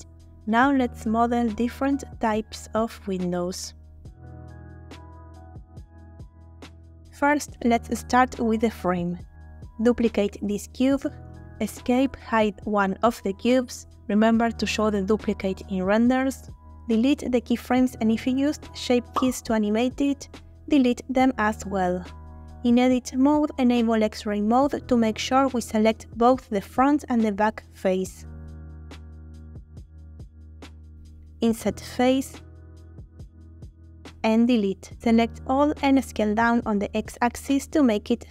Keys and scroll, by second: 11.2 shift+d, 12.1 Escape, 18.0 Delete, 22.4 Tab, 26.2 3, 31.7 i, 34.1 Delete, 35.1 a, 35.5 s, 35.7 x, 38.1 g, 38.1 x.